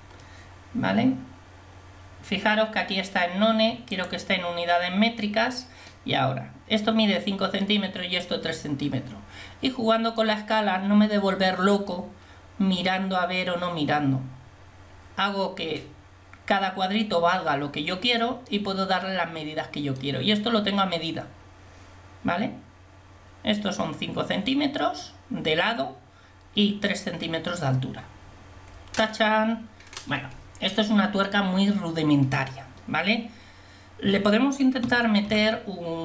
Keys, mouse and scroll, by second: 4.0-18.7 drag, 18.7 middle click, 34.9 a, 35.4 a.